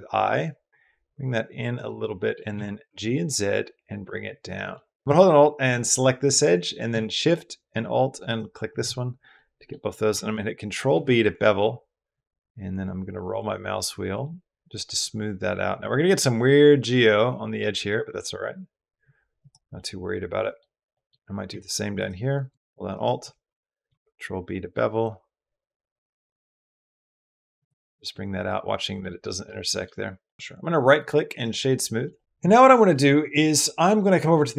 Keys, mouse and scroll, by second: 1.5 click, 1.9 click, 2.3 g, 2.6 z, 4.2 click, 4.5 middle click, 9.2 click, 9.7 click, 10.7 ctrl+b, 19.7 click, 20.9 click, 22.7 alt+shift+click, 23.7 ctrl+b, 27.4 click, 27.9 middle click, 28.9 middle click, 29.4 shift+middle click, 30.2 middle click, 30.9 middle click, 31.5-31.8 middle drag, 32.0 middle drag, 32.3 middle click, 32.7 middle drag, 33.2 middle drag.